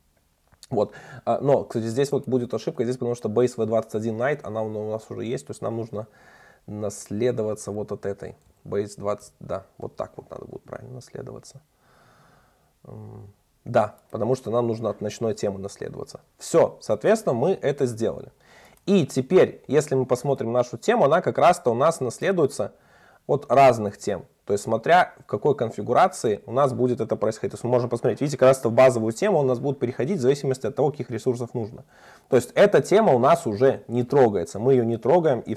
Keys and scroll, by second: 6.6 super+BackSpace, 7.8 alt+Up, 9.3 alt+Up, 10.4 super+s, 15.3 super+s, 23.7 super+b, 27.1 super+b.